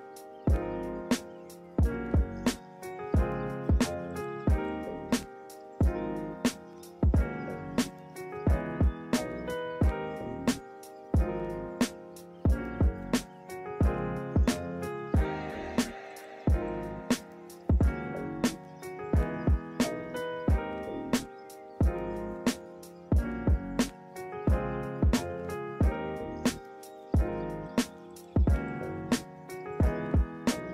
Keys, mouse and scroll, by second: 9.2 ctrl+=, 10.6 ctrl+-, 10.7 ctrl+=, 12.8 ctrl+-.